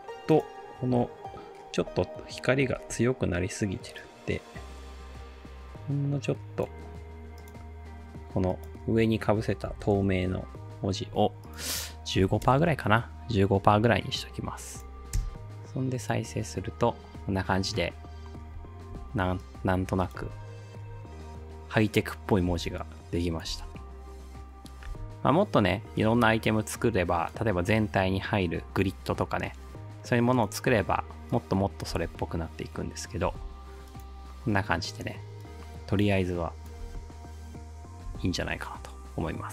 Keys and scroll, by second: 2.8 t, 9.4-10.2 typing, 11.9-12.9 typing, 15.2 space, 18.9 space, 20.2 space, 22.5 space, 23.5 space, 24.9 space, 32.0 space, 33.3 space, 36.8 space, 38.1 space.